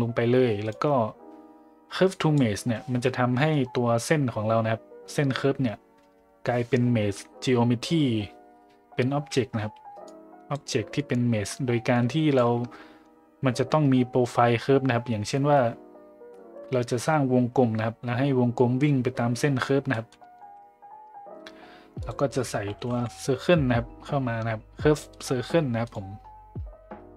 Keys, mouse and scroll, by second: 2.2 click, 10.0-10.5 drag, 11.0-11.5 drag, 11.9 click, 19.9 middle click, 20.4 shift+a.